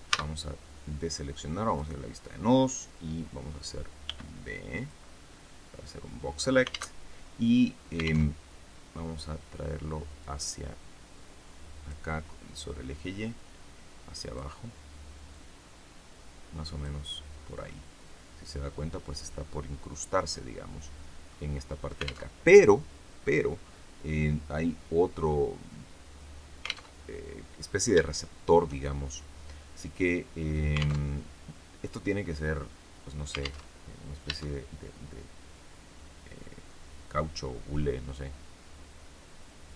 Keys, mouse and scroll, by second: 0.0 a, 1.6 click, 3.9 b, 4.1 click, 6.9 alt+Tab, 8.3 alt+Tab, 10.1-12.0 drag, 12.9-14.5 drag, 15.2-16.9 drag, 17.5-21.4 middle drag, 22.1 alt+Tab, 26.8 alt+Tab, 28.0 shift+middle click, 28.4 shift+scroll up 2, 30.9 alt+Tab, 33.5 alt+Tab, 34.2 Tab.